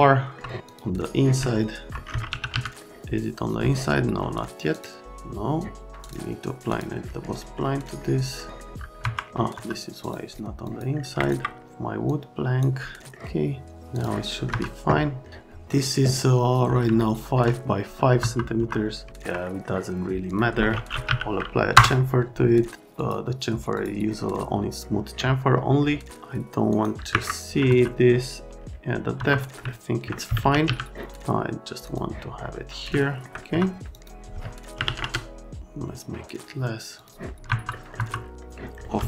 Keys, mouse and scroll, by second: 0.7 click, 1.5 alt+middle click, 1.9 right click, 2.2 f, 2.5 z, 2.8 right click, 4.7 click, 6.0 click, 6.7 click, 7.4 middle click, 8.4 middle click, 9.0 F3, 9.5 F3, 10.0 click, 10.6 click, 11.2 ctrl+click, 12.0 click, 14.5 F3, 17.0 alt+middle click, 18.2 F3, 18.6 F3, 19.1 alt+middle click, 19.4 middle click, 20.3 click, 20.7-21.6 typing, 21.7 Return, 23.0 right click, 23.8 right click, 27.1 Escape, 27.7 F3, 29.2 F3, 29.6 alt+middle click, 30.2-31.1 typing, 31.8 click, 32.4 middle click, 33.0 alt+middle click, 33.5 F3, 33.9 click, 34.7 KP_Decimal, 34.8 KP_5, 36.9 click, 37.4 F3, 37.7 scroll, 38.8 scroll.